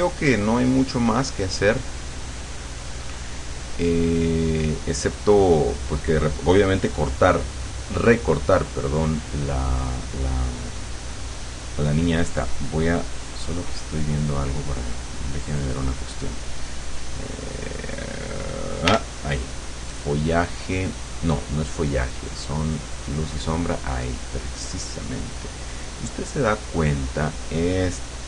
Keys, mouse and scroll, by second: 0.7 click, 1.8-3.8 drag, 4.0 click, 6.7 click, 8.7 click, 13.2 click, 16.2 click, 17.6 click, 19.0 l, 20.3-22.8 drag, 23.1 click, 25.0 click, 26.4 click.